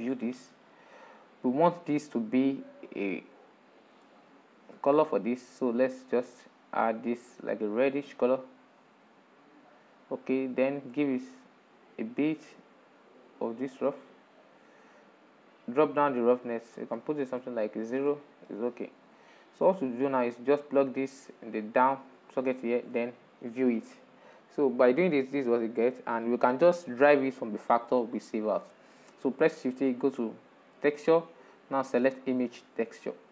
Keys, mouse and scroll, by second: 0.0 ctrl+shift+click, 1.8-2.5 shift+middle drag, 2.5-2.9 scroll up 6, 8.4 click, 10.6 shift+middle click, 11.6-14.6 drag, 14.8-17.2 drag, 17.2 shift+middle click, 17.8-18.2 scroll down 5, 18.2-22.0 shift+middle drag, 22.0 click, 22.8 ctrl+shift+click, 24.2-27.4 shift+middle drag, 27.4 click, 28.2-29.7 shift+middle drag, 29.7 shift+a.